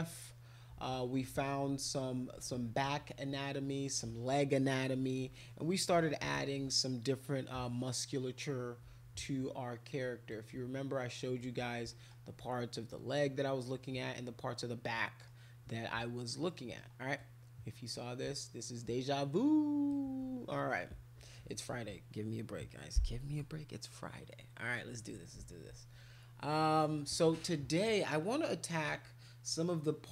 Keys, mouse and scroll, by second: 2.3 click, 10.3-11.4 right drag, 11.9 middle click, 13.6-15.3 middle drag, 16.5 middle click, 17.1-19.9 right drag.